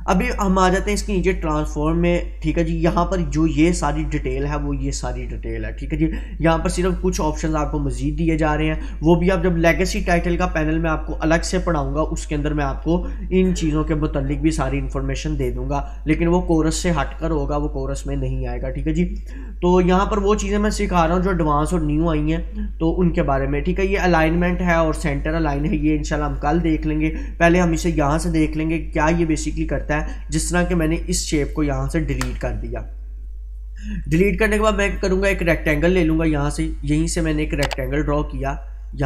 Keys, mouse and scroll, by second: 31.6-32.1 click, 32.1 Delete, 34.9-38.0 drag.